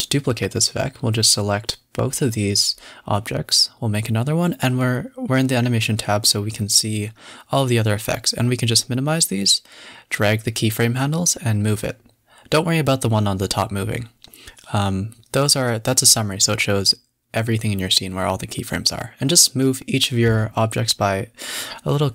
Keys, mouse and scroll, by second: 0.3-0.7 scroll up 10, 0.9 click, 1.3 shift+click, 1.7 KP_7, 2.0 KP_0, 2.5 scroll up 6, 3.0 shift+d, 3.2 s, 4.5 shift+d, 4.7 s, 6.3 shift+d, 6.4 s, 8.3-9.5 drag, 9.5 a, 10.5-11.5 drag, 11.5 g, 16.2 g, 17.0 g, 19.1 g, 20.7 scroll down 5, 21.0 a, 21.2-21.6 scroll up 4, 21.8 scroll down 1.